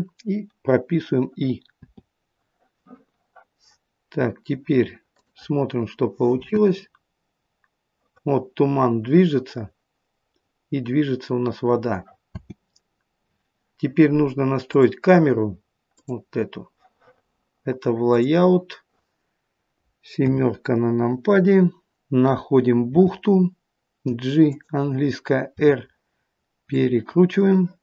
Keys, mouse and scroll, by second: 18.4 click, 20.2 KP_7, 23.0 g, 25.6 r, 27.4 middle click.